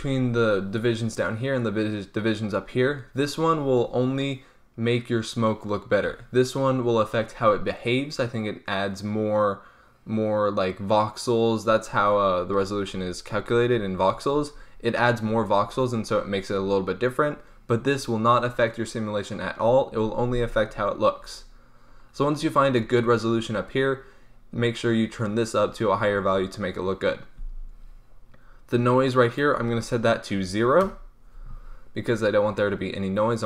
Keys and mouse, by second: 29.2-33.4 drag.